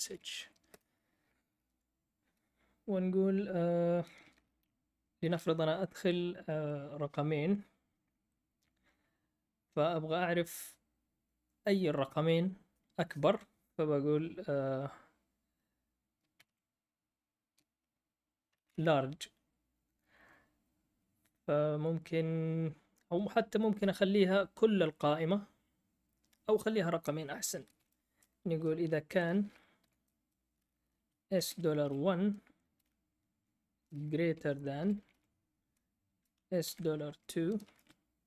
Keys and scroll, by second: 0.0-0.7 typing, 1.7 F8, 16.1-16.8 typing, 18.5 BackSpace, 18.7 BackSpace, 27.5-28.4 typing, 29.5-32.6 typing, 34.5-36.6 typing, 37.6-38.2 typing.